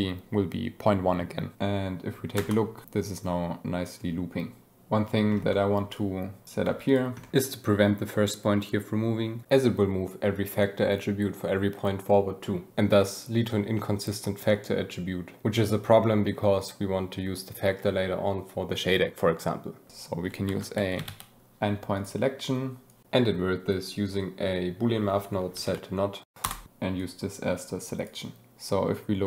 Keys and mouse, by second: 2.3 space, 5.4 click, 5.9 click, 6.6 g, 6.8 click, 7.1 click, 8.6 space, 9.4 space, 20.4 shift+a, 21.9 click, 22.8 click, 25.6 Down, 26.9-28.0 drag.